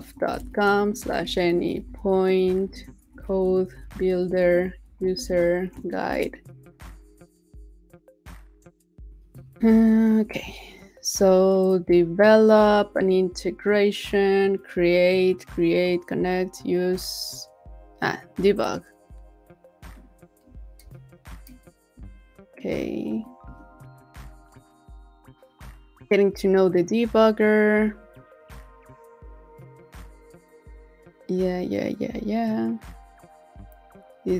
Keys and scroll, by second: 9.6 super++, 9.9 super++, 20.8 super++, 21.5 super++, 23.2 super+-.